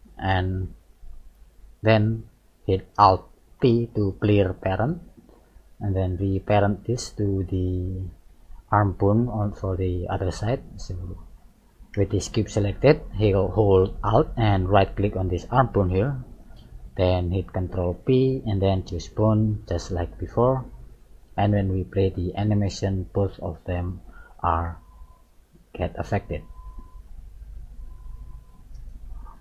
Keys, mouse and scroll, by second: 0.2 click, 1.4-3.3 scroll up 2, 3.6 alt+p, 5.7 middle click, 8.4-9.0 scroll up 1, 9.3 scroll up 1, 9.6-10.1 scroll down 2, 10.1 middle click, 15.9 shift+right click, 16.6 middle click, 17.9 ctrl+p, 19.5-19.8 scroll down 3, 20.1 middle click, 22.2 click, 23.8 click, 23.9 right click, 24.7 g.